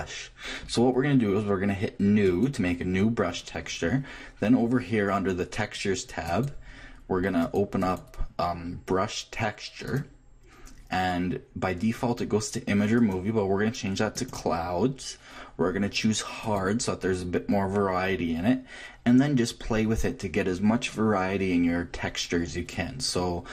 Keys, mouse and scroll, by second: 2.2-4.1 drag, 6.4-9.6 drag, 12.9-14.7 drag, 16.4-18.2 drag.